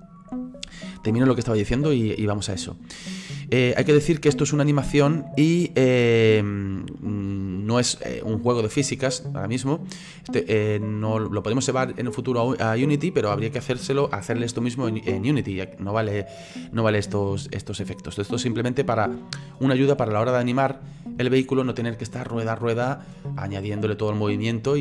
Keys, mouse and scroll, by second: 4.1-7.1 drag, 8.9-12.6 drag, 12.8-15.1 middle drag, 15.1-15.5 scroll up 2, 15.5-17.3 shift+middle drag, 17.3-20.3 drag, 20.3-24.8 middle drag.